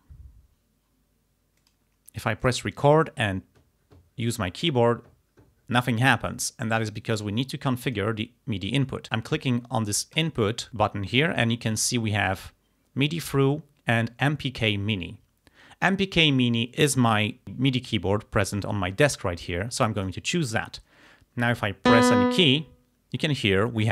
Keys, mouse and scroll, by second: 1.6 click, 2.5 click, 7.9 click, 10.2 click, 20.1 click.